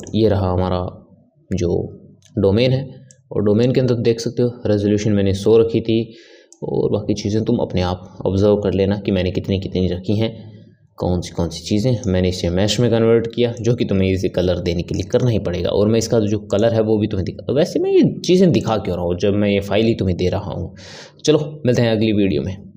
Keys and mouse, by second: 3.0-6.2 drag, 6.5-9.6 drag, 13.5-16.6 drag, 18.6 click.